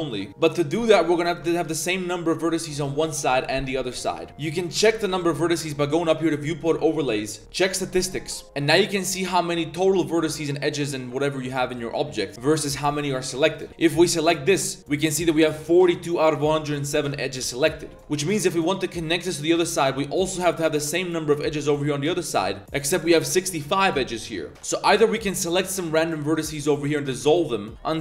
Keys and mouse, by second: 1.2 alt+click, 2.7 alt+click, 3.1 alt+shift+click, 4.3 alt+a, 5.1 alt+click, 6.3-8.4 drag, 8.4 a, 13.1 middle click, 13.6 alt+click, 17.4 2, 17.7 middle click, 18.0 middle click, 18.4 alt+click, 20.6 alt+click, 21.5 alt+click, 24.5 click, 24.5 1, 24.8 shift+click, 25.1 shift+click, 25.3 shift+drag, 25.5 shift+click, 25.8 shift+click, 26.0 shift+click, 26.5 shift+click, 26.8 shift+click, 27.2 x.